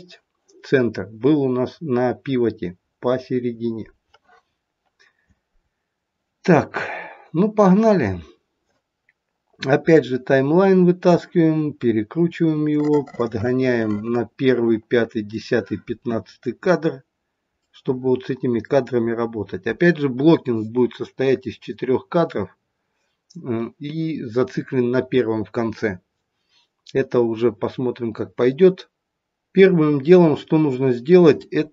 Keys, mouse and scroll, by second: 10.0 click, 11.6-12.6 scroll up 11, 12.6 middle click, 12.8 middle click, 16.3-17.6 scroll up 7, 17.6 middle click, 17.6-19.9 scroll up 2.